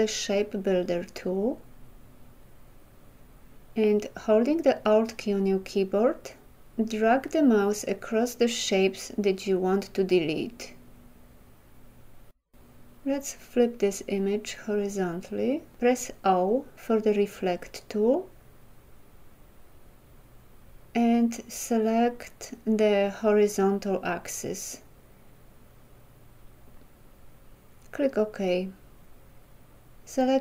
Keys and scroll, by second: 16.2 o.